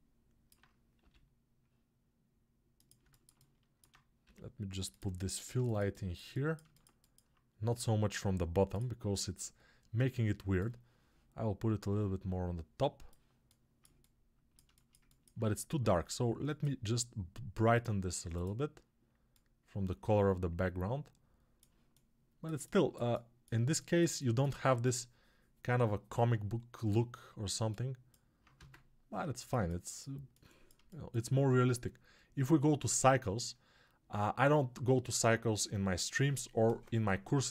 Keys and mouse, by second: 21.6-37.5 alt+right drag, 28.5 ctrl+space.